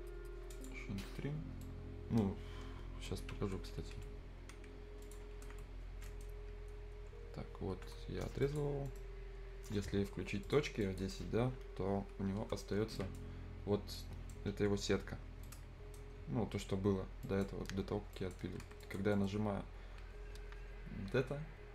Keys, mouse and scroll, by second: 1.6-4.8 right drag, 4.8 scroll up 1, 5.0 click, 5.3 scroll down 1, 6.1 right click, 8.4 click, 8.9 middle click, 10.5 click, 12.4 F10, 13.0 right click, 13.3 scroll up 1, 13.7 scroll down 1, 14.0-15.4 right drag, 15.4 scroll up 1, 15.5 right click, 16.2 scroll up 1, 16.7-17.0 scroll down 1, 17.0 scroll up 1, 17.2 right click, 17.6-18.2 scroll up 1, 18.2 right click, 18.5 Escape, 18.6 scroll up 1, 18.8 Escape, 18.8 click, 19.1 middle click, 19.2 scroll up 1.